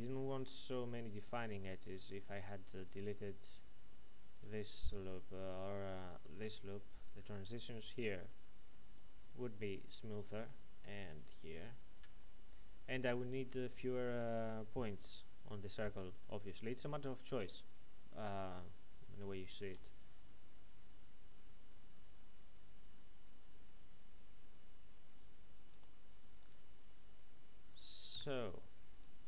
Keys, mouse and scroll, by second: 0.6 shift+right click, 8.7-12.1 typing, 8.9 click, 14.3 typing, 19.7-21.9 typing, 20.0 right click, 25.1 typing, 27.8-28.6 typing, 28.9 right click.